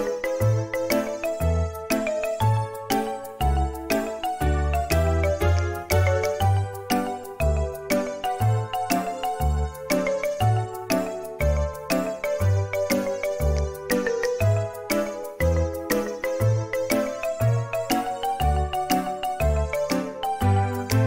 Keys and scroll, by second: 0.0-0.2 typing, 6.4 space, 7.9 Delete, 12.4 i, 13.9 space, 16.8 Delete.